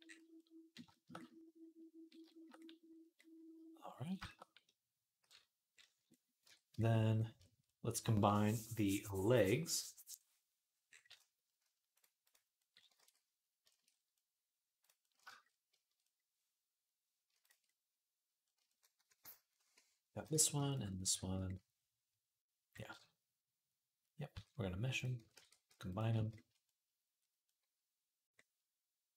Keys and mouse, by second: 6.3 Tab, 11.7-13.4 right drag, 13.1 ctrl+s, 13.4 shift+click, 13.6-15.1 right drag, 15.1 shift+click, 15.2 right click, 15.5 shift+click, 15.7-29.1 right drag, 17.2 shift+middle click, 19.0 middle click, 19.5 g, 24.1 q, 25.1 ctrl+a.